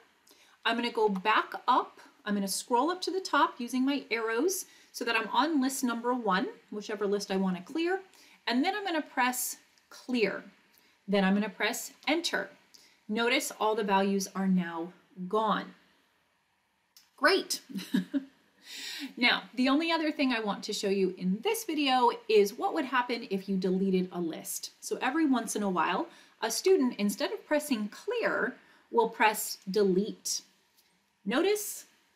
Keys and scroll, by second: 0.7 Up, 1.1 Up, 11.9 Return, 26.6 Up, 29.6 Delete.